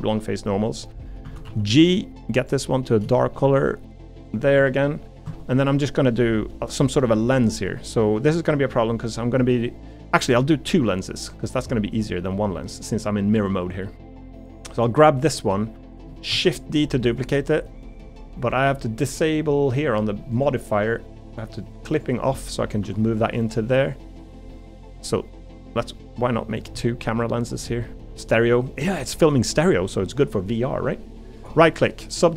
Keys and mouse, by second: 1.2 a, 1.5 g, 3.1 shift+middle click, 3.4 g, 4.5 Tab, 4.8 middle click, 5.9 middle click, 7.0-9.0 middle drag, 11.8 middle click, 13.7 middle click, 14.8 middle click, 16.3 shift+d, 17.4 middle click, 22.3 middle click, 22.8 g, 23.7 middle click, 24.5 middle click, 25.1 middle click, 25.7 middle click, 26.1 g, 26.8 middle click, 27.7 middle click, 28.1 g.